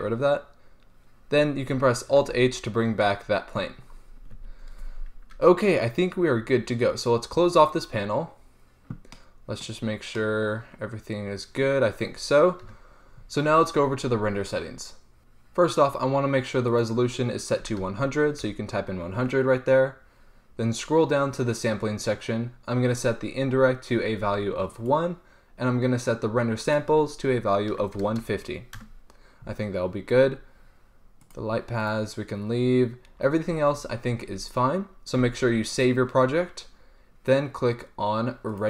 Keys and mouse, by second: 2.4 alt+h, 4.6 a, 7.3 click, 8.6-9.3 middle drag, 9.6 middle click, 12.9 KP_0, 16.9-18.6 drag, 18.2 KP_0, 23.1-25.0 drag, 25.0-26.8 middle drag, 26.8-28.5 drag, 30.3-31.5 middle drag, 31.5-33.7 drag, 33.7 middle click, 35.5 ctrl+s.